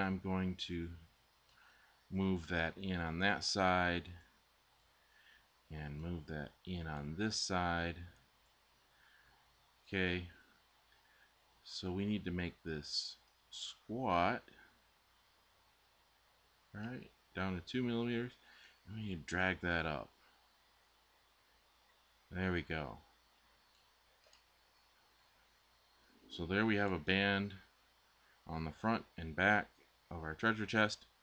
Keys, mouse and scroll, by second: 9.0 super+right click, 25.0-26.6 super+right drag.